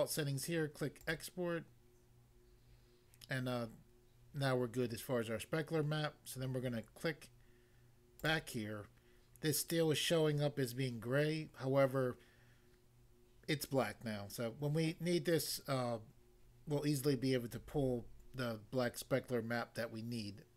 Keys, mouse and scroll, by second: 1.0 click, 1.1 click, 8.2 click, 8.3 click.